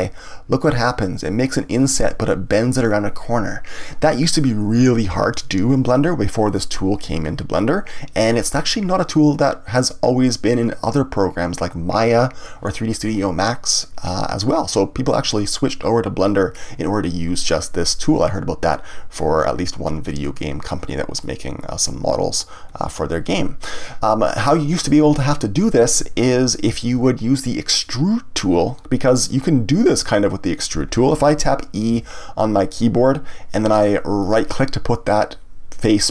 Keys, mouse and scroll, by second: 1.8 click, 14.0-17.0 middle drag, 21.2-23.8 middle drag, 26.7 ctrl+z, 29.9 click, 31.9 e, 34.3 right click.